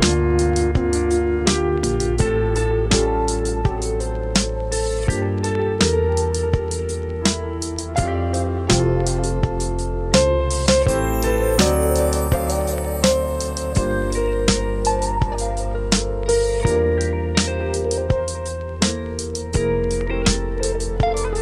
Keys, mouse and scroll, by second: 1.2-1.6 scroll up 1, 1.6 scroll down 1, 4.4-10.8 drag, 10.8 ctrl+s, 11.2-11.5 scroll down 3, 11.5-12.3 middle drag, 12.3-12.8 scroll down 4, 12.8-14.6 middle drag, 14.6 KP_0, 16.5 click, 17.2-19.1 drag, 19.1 scroll up 5, 19.6 scroll down 3, 20.4 ctrl+s, 21.1-21.4 drag.